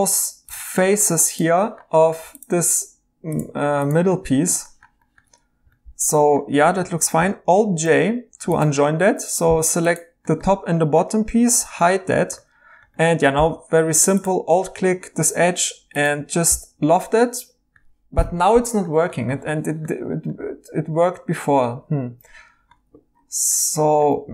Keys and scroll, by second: 7.8 alt+j, 8.7 Tab, 11.6 h, 13.2 2, 22.7 Escape.